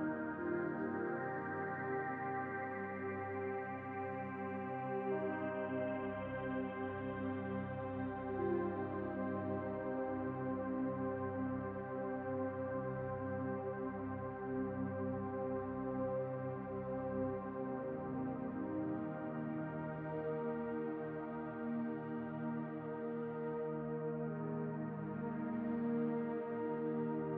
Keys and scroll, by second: 18.4-20.0 typing.